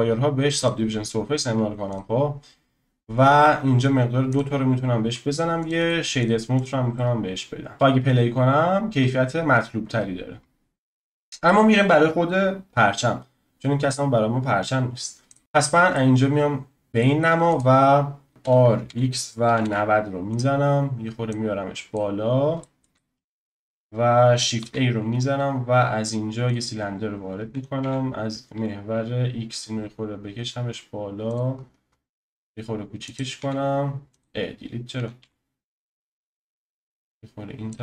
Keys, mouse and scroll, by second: 0.6-3.6 drag, 4.3-5.7 drag, 5.8-6.5 right drag, 6.5 click, 6.9-7.7 middle drag, 7.7 click, 11.2 middle click, 15.3 click, 15.6-15.9 scroll down 2, 15.9-17.5 middle drag, 17.5 click, 18.3 click, 18.4 r, 21.3 click, 22.2-22.6 scroll down 2, 22.6-24.6 shift+middle drag, 24.6 shift+a, 26.5 shift+a, 27.5 s, 32.4 s, 33.4 x, 34.9 s, 36.9 click, 37.7 s.